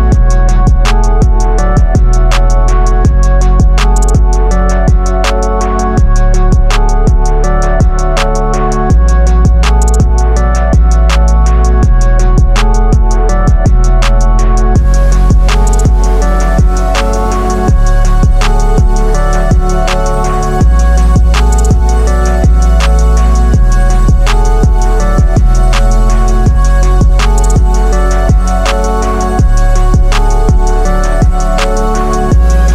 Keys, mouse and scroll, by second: 0.1-1.3 drag, 2.8 Left, 3.9 Down, 6.2-6.9 drag, 7.5 Up, 9.7 click, 9.7-10.4 click, 10.7 Left, 13.6-14.3 click, 14.7 Down, 18.2-18.9 click, 19.1 Right, 21.9 click, 24.1 Right, 25.7-26.4 click, 26.7 Left, 29.0-30.1 drag, 30.5 Up, 32.5-32.7 drag.